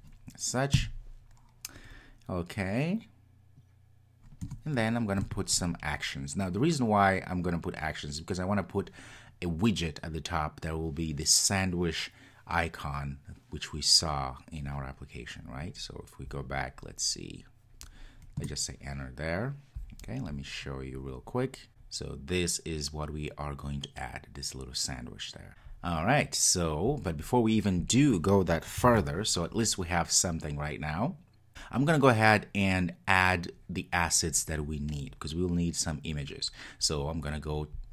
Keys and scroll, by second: 18.4 Return, 28.9 super+s.